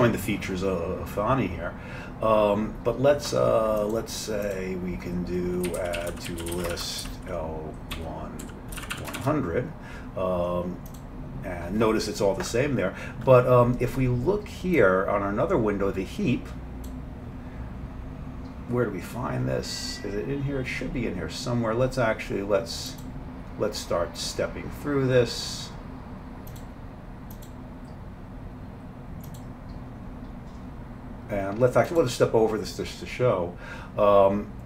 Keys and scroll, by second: 5.7-9.2 typing.